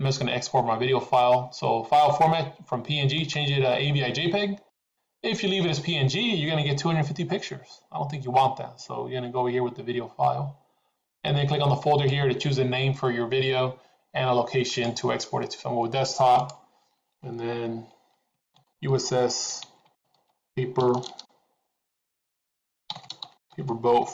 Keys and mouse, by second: 3.1-5.9 drag, 11.9 click.